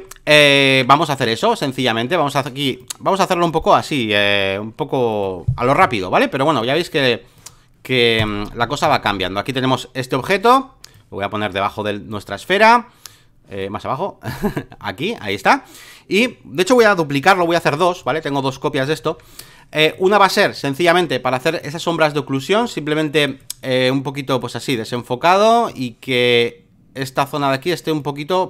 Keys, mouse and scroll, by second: 0.0 alt+middle click, 1.7-8.4 drag, 8.6 ctrl+d, 8.8 v, 9.0-16.8 drag, 17.4 ctrl+j, 18.0 click, 19.0 ctrl+z, 19.9-21.1 drag, 23.4-28.4 drag.